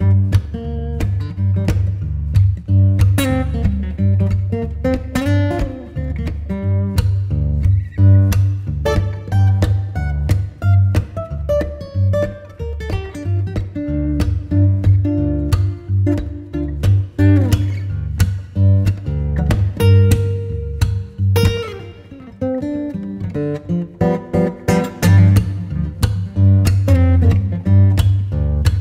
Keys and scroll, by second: 0.1 super+[, 8.1 b, 22.1 v, 22.5 z, 23.6 v, 24.3 super+v.